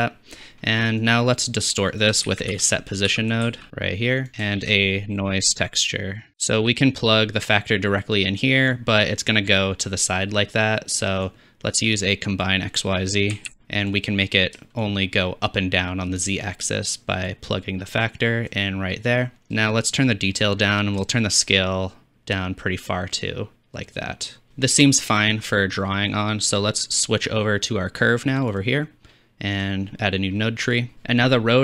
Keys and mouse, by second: 2.3 shift+a, 4.6 shift+a, 7.6-8.7 drag, 14.0-14.8 drag, 16.3 shift+click, 16.4-17.3 shift+middle drag, 17.3-19.1 drag, 28.6 click, 29.6-31.6 drag.